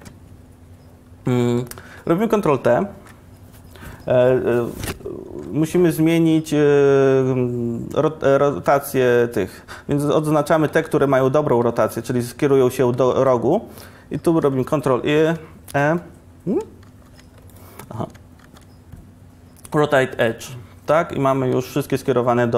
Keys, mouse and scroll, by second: 3.1 ctrl+t, 10.3 c, 18.5 ctrl+e, 20.4 ctrl+e.